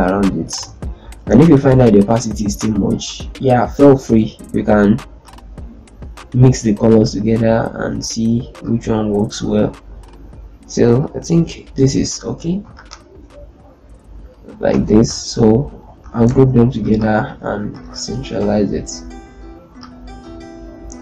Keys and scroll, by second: 0.1 Up, 0.4 Left, 12.5 typing, 14.4 ctrl+space, 17.0 shift+c, 18.2 F4, 20.0 z.